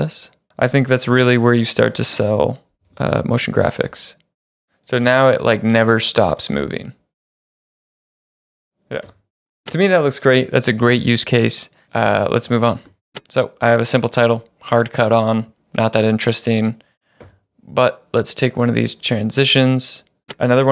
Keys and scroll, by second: 0.6-1.3 typing, 2.6-3.4 typing, 4.5 Home, 4.9 space, 9.1 space, 13.1 space, 17.3 space.